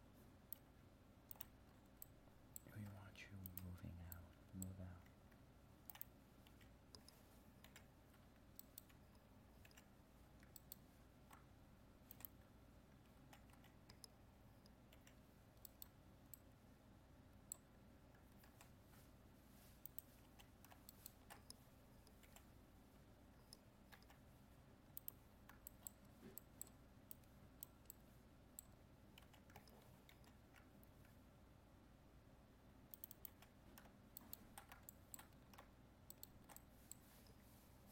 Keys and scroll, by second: 18.5 ctrl+Tab, 30.2 ctrl+r.